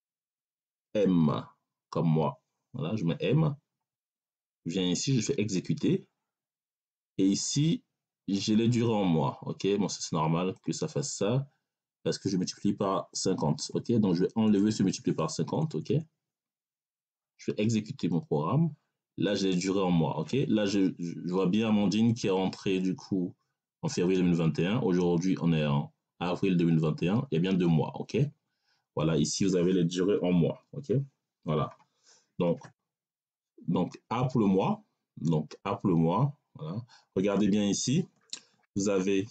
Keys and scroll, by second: 1.9 m, 15.4 BackSpace.